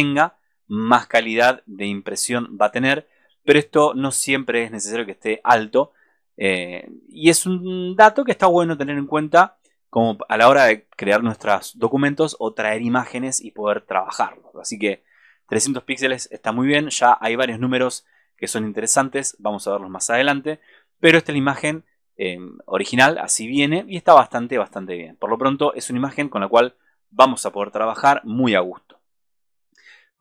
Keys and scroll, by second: 27.5 super+-.